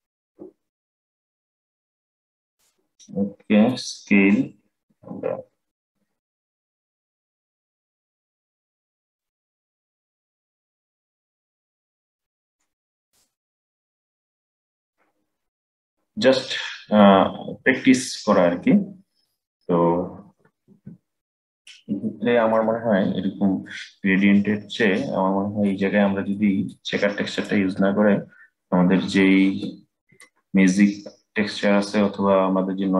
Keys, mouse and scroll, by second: 3.4-6.4 drag, 12.7 click, 14.9-15.9 middle drag, 15.9-16.7 scroll down 8, 16.7-19.9 middle drag, 24.7-27.0 middle drag, 27.0 click.